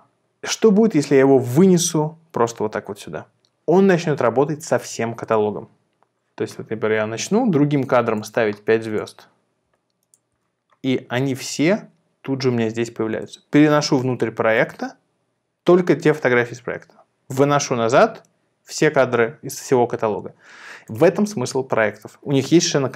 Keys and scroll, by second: 7.8 5, 8.6 5, 9.8 5.